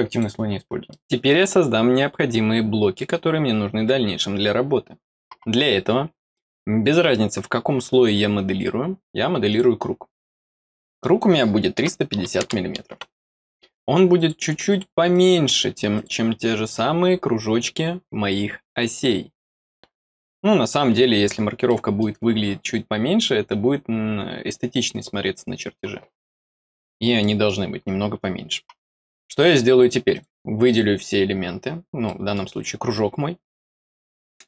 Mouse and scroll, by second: 0.8 middle click, 9.4 click, 10.2 click, 11.0 scroll down 2, 13.3 middle click, 14.1 click, 14.6 click, 15.0 click, 15.9 click, 16.7 scroll up 2, 19.6 scroll down 2, 21.6 middle click, 26.2 middle click, 27.1 middle click, 30.0 click, 30.6 click, 32.0 middle click.